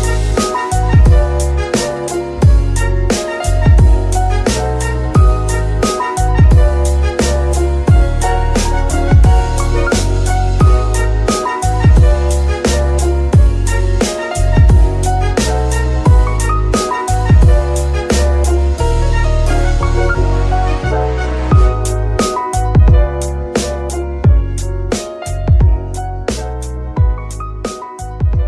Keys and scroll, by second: 4.5 KP_3, 5.0 z, 15.1 z, 16.7 KP_3, 17.1 z, 23.8 z.